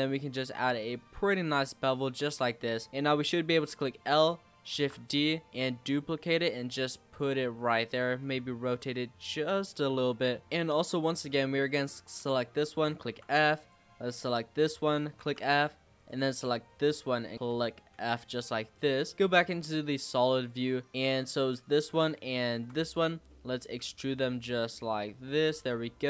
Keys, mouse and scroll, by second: 2.9 click, 3.7 l, 4.8 shift+d, 8.3 r, 9.9 g, 10.4-11.7 shift+middle drag, 11.7 click, 12.2 l, 13.0 f, 13.6 click, 14.5 l, 15.2 f, 16.0 click, 17.6 l, 18.0 f, 18.8 middle click, 19.1 z, 19.4-20.4 middle drag, 20.4 click, 20.9-22.4 middle drag, 22.4 shift+click, 22.9 middle click, 23.8 e, 25.8 middle click.